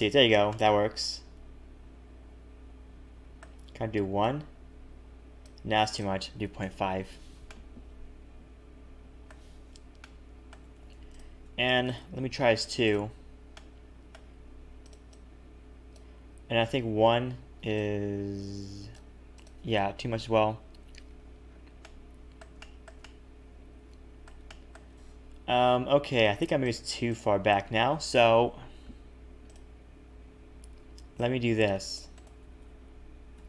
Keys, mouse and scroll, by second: 0.5 middle click, 4.2 click, 5.9 click, 7.4 middle click, 10.0 middle click, 10.6 a, 10.7 a, 11.1 alt+shift+click, 11.8 right click, 13.5 middle click, 14.8 click, 15.1 click, 19.3 click, 21.1 a, 21.2 a, 21.4-22.0 scroll down 5, 21.8 middle click, 22.6 shift+middle click, 23.0 middle click, 24.4 shift+middle click, 25.0 scroll up 1, 26.6 click, 27.1 shift+click, 28.5 KP_7, 29.4 click, 30.8 c, 32.4 g.